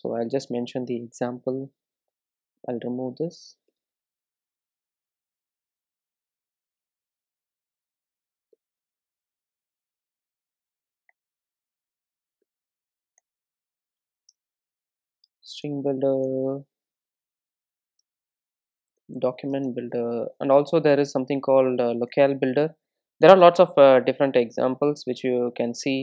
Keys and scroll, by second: 9.7 super+z.